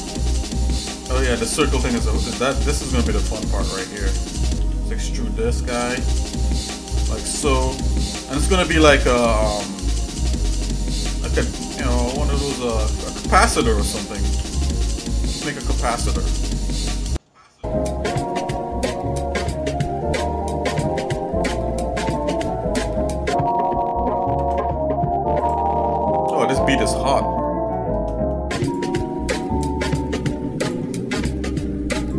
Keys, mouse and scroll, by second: 0.1 shift+middle click, 1.0-1.9 scroll up 3, 2.0 click, 2.5 click, 2.8 shift+click, 3.2 shift+click, 4.6 e, 10.2 e, 12.1 s, 14.4 e, 19.0 shift+middle click, 19.5 scroll up 1, 19.5 middle click, 20.7 scroll down 1, 20.8 scroll up 1, 21.0 scroll down 1, 21.5 scroll down 1, 21.6 shift+middle click, 22.6 shift+middle click, 23.1-23.7 scroll up 3, 24.3 ctrl+Tab, 27.7 shift+middle click, 28.6 click, 29.4 alt+shift+click, 30.7 alt+shift+click, 31.1 shift+middle click, 32.0 alt+shift+click.